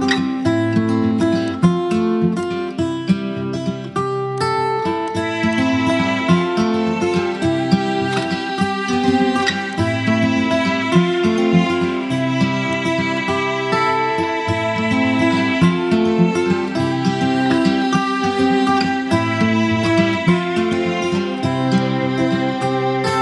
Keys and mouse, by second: 0.9 click, 7.4-8.0 shift+drag, 9.7-10.3 click, 12.4 click, 16.4 b, 19.7-20.3 drag, 21.3 space, 21.5-22.1 click, 22.1 space.